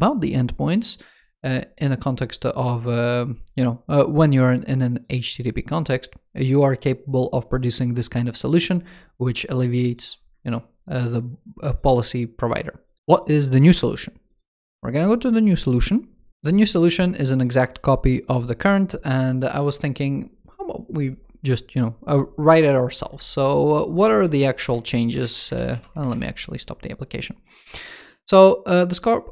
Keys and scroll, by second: 13.0 super+w, 23.9 super+2, 25.0 super+2, 25.4 ctrl+c, 25.9 super+2.